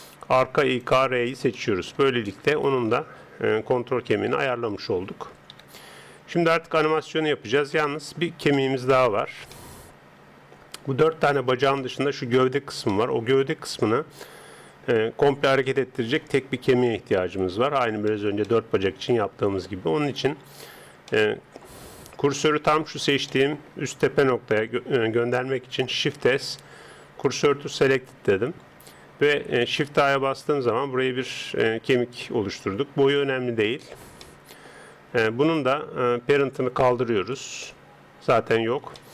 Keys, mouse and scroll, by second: 1.6-3.7 middle drag, 2.6 right click, 3.7 g, 5.6 KP_3, 6.8 middle click, 11.8-12.9 middle drag, 16.2 middle click, 17.1 Tab, 20.4 click, 26.0 shift+s, 29.9 shift+a, 32.1 click, 33.8-35.4 middle drag, 35.4 right click, 37.3 click, 39.0-39.1 middle drag.